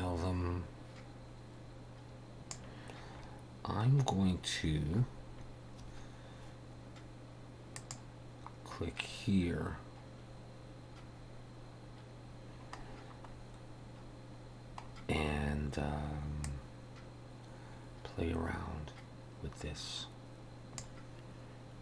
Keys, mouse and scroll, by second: 4.0 scroll down 2, 4.8 scroll up 1, 5.4 scroll up 2, 7.8 click, 12.3-13.5 scroll down 7, 14.9-15.2 scroll down 2, 16.4 click.